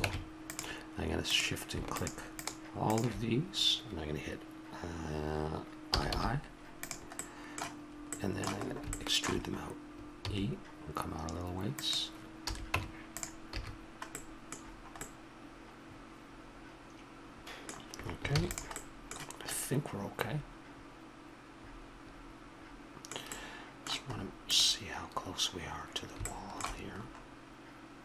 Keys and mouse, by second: 0.0 ctrl+Tab, 5.9 i, 7.2-8.8 middle drag, 9.0-10.1 middle drag, 10.1 e, 12.4 a, 12.7 Tab, 13.6 a, 13.7 click, 14.7 middle click, 16.6 middle click, 18.3 ctrl+s, 18.8 middle click, 24.5-26.4 drag, 27.0-28.0 middle drag.